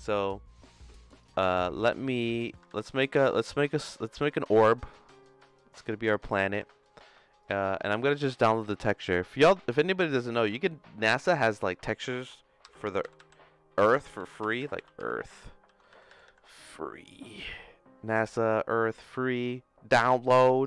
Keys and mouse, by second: 2.2 x, 2.7 shift+a, 5.8 right click.